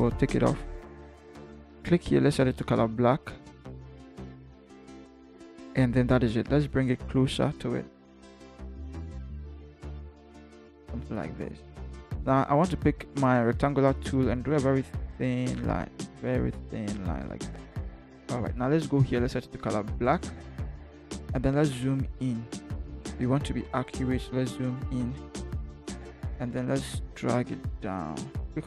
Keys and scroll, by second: 7.3 v, 8.0 Down, 8.2 Down, 8.5 Down, 8.5 Down, 8.8 Left, 9.1 Left, 9.5 Down, 10.1 Right, 10.5 Right, 10.9 Right, 21.7 ctrl+=, 22.1 ctrl+=, 27.3 shift+Down, 28.2 shift+v.